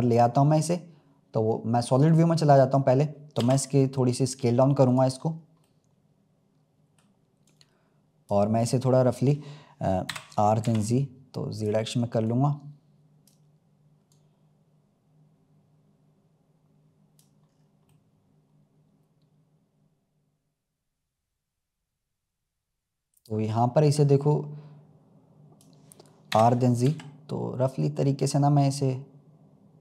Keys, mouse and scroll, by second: 0.4-1.5 scroll up 3, 2.0-3.3 drag, 3.3 s, 5.2-5.6 scroll up 2, 5.6-7.4 middle drag, 7.4 click, 8.6-10.0 middle drag, 10.0 r, 12.2 click, 14.0 click, 17.4-17.8 scroll up 4, 17.8-23.8 middle drag, 23.8 click, 26.3 r.